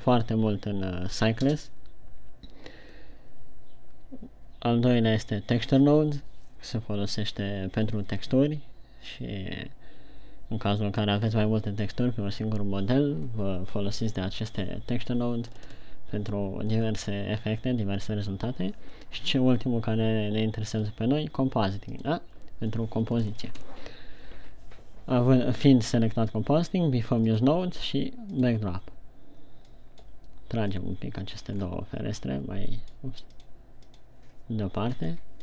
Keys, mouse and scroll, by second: 2.0 KP_0, 27.6 click.